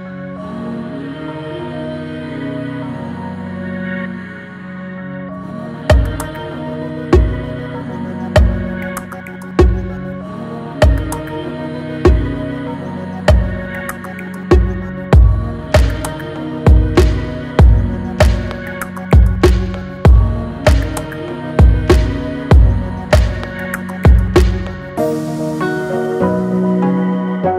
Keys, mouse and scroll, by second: 0.5-5.0 drag, 14.2 click, 19.9 click, 23.3 click, 26.9 click.